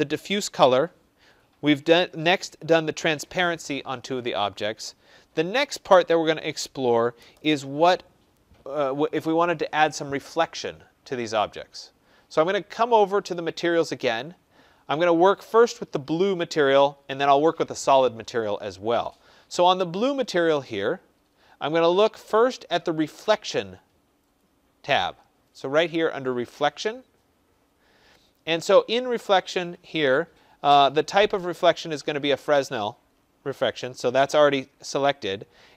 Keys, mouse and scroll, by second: 13.2 click, 15.6 click, 24.3-29.4 drag.